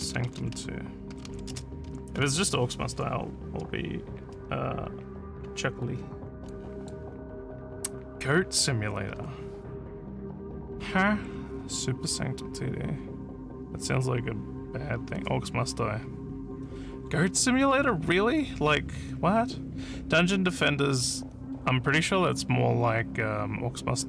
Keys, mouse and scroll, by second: 0.0-1.9 typing, 6.5 click.